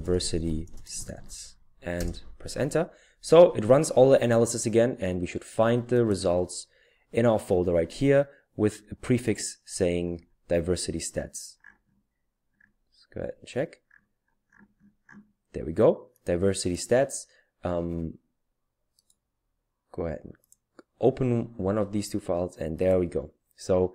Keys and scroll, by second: 0.0-1.7 typing, 1.9 Return.